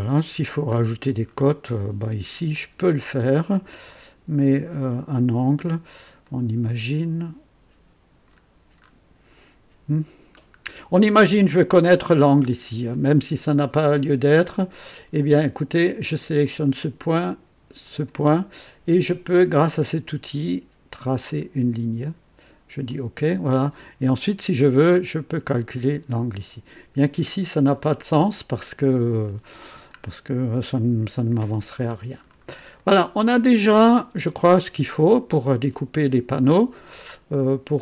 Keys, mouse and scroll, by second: 0.7-1.5 scroll up 3, 1.7 right click, 2.0 right click, 6.3-8.0 right drag, 8.3-9.1 scroll up 4, 10.5 scroll up 2, 16.4 click, 17.8 ctrl+click, 21.2 click, 22.8 click, 30.0-30.3 scroll down 2, 31.3-32.5 scroll down 5, 32.8-33.9 right drag, 35.1-35.4 scroll up 2, 37.0 right click, 37.3 click.